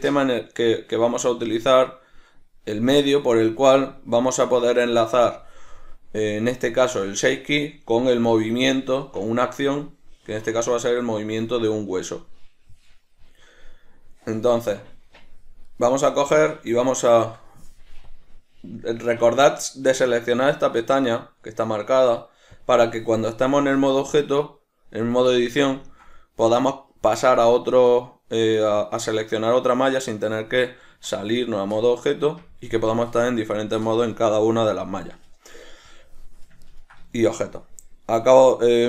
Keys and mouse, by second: 15.8 right click, 18.2-23.6 drag, 23.6 right click, 25.5-26.5 shift+middle drag, 26.5 right click, 27.5 right click, 28.0 right click, 28.7 right click, 29.2 right click, 29.7 right click, 31.0 Tab, 33.4 right click, 34.0 right click, 36.8-38.8 ctrl+middle drag.